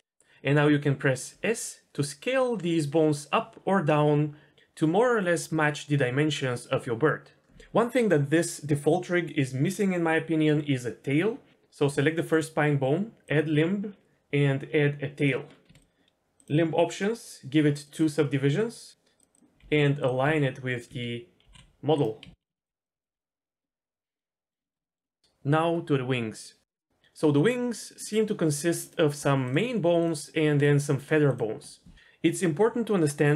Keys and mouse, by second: 1.3 s, 12.3 click, 13.2-15.3 drag, 16.3-18.9 drag, 18.9 r, 19.2 click, 19.6 r, 20.2 s, 20.9 s, 22.2-23.2 typing, 24.1 middle click, 25.0 middle click, 26.7-28.5 middle drag, 28.8 shift+click, 30.9 shift+click.